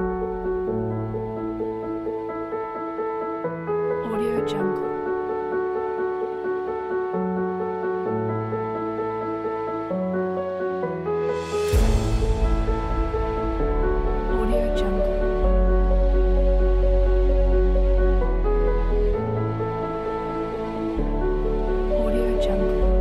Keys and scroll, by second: 11.4 super+c, 14.2 super+v.